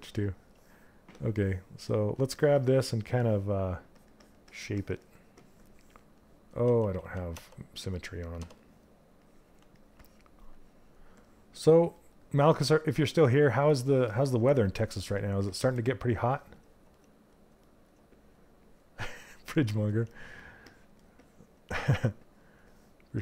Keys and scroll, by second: 6.2 ctrl+z, 6.5 ctrl+z.